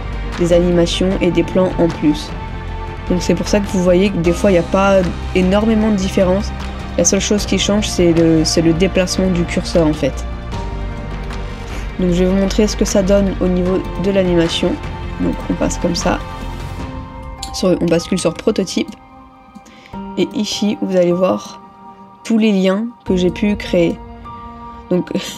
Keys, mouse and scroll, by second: 3.8 ctrl+-, 5.7 middle click, 10.6 middle click, 11.6 ctrl+-, 11.8 ctrl+-, 12.0 ctrl+-, 12.4 ctrl+-, 16.0 ctrl+middle click, 17.9 ctrl++, 18.2 ctrl++.